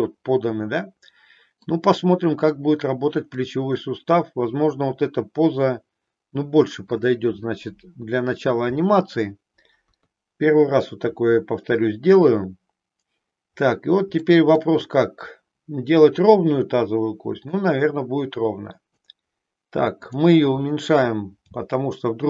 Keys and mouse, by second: 3.5-7.1 middle drag, 9.8 KP_3, 14.2 shift+middle click, 17.5-18.9 drag, 19.9 click, 21.5 g.